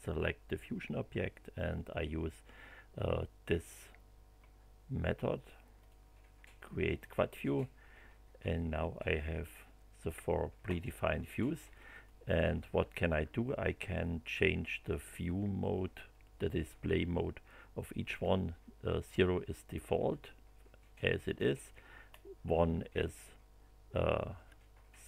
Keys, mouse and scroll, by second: 5.8 click, 7.0 click, 11.9 click, 18.0 click, 22.1 scroll up 1.